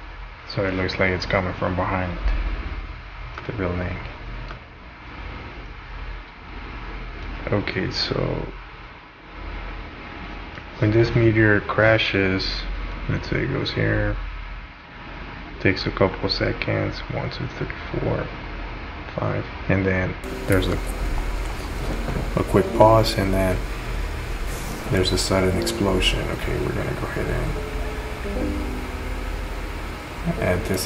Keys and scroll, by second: 0.8 space, 1.4 space, 5.6 space, 6.2 space.